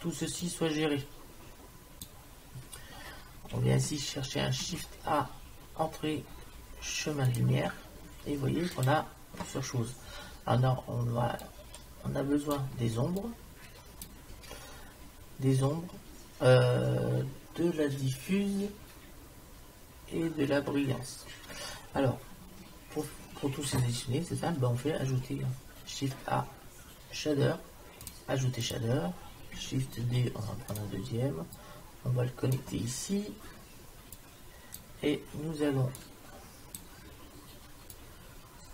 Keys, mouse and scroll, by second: 4.5 shift+a, 11.4-14.9 drag, 25.0 shift+a, 30.0 shift+d, 31.6-33.6 drag, 34.2-36.2 drag.